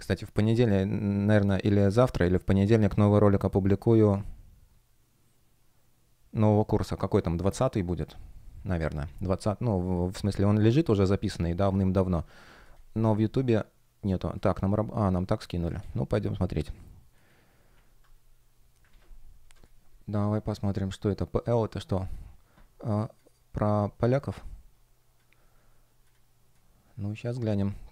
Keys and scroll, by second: 15.7 super+c, 18.8 super+m, 19.3 Return.